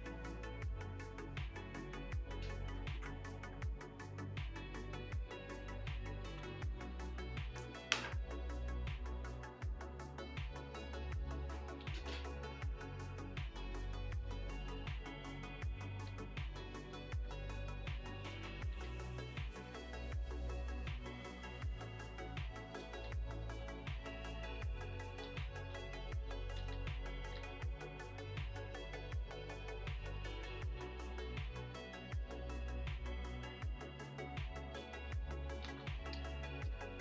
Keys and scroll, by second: 2.8 ctrl+z, 6.2 ctrl+z, 7.8 ctrl+z, 11.8 ctrl+z, 14.7 ctrl+z, 16.0 ctrl+z, 18.5 ctrl+z, 23.0 x, 25.2 ctrl+z, 25.7 x, 26.6 ctrl+z, 27.3 ctrl+z, 34.7 ctrl+z, 35.6 ctrl+z, 36.1 space, 36.7 r.